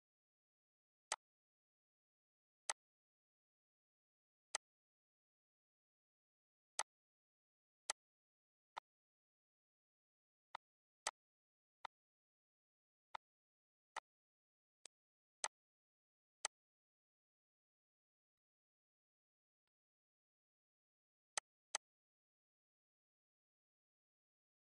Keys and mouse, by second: 0.5 click, 1.7 click, 2.7 click, 3.5 click, 4.9 click, 7.2 click, 7.9 click, 9.0 click, 9.7 click, 11.0 click, 12.0 click, 13.8 click, 14.5 click, 15.1 click, 16.0 click, 19.5 click.